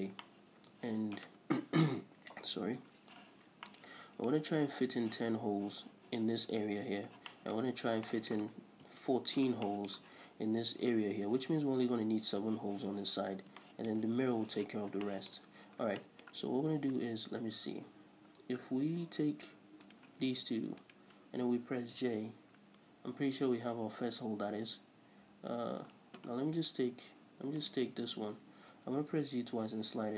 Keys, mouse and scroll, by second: 0.0 scroll down 1, 0.3-9.0 shift+middle drag, 7.1-7.4 scroll up 2, 9.0 KP_7, 9.4-19.9 middle drag, 14.9 scroll down 2, 15.5-16.1 scroll up 2, 19.9 right click, 21.0 shift+right click, 22.1 j, 25.7-26.5 scroll up 1, 26.7 right click, 27.7 right click, 29.0 g.